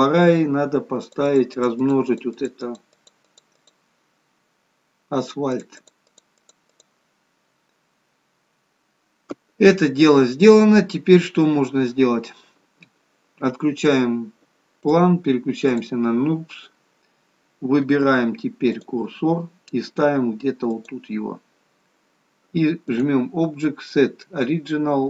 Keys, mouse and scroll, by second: 1.1 click, 1.3 click, 1.6 click, 1.8 click, 2.1 click, 2.7 click, 3.0 click, 4.2-4.8 scroll down 1, 4.8-5.5 scroll down 1, 5.5 click, 5.8 click, 6.2 click, 6.5 click, 7.1 click, 7.8-8.4 scroll down 3, 8.2-9.5 scroll up 7, 9.7-10.2 scroll up 2, 14.9 click, 15.7 click, 21.1 click.